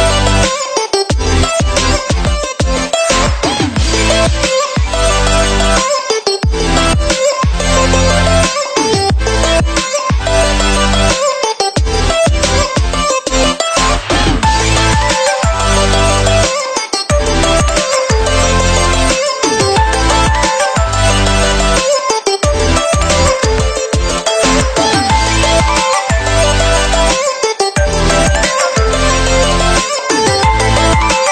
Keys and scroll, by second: 3.1 p, 22.5 ctrl+=.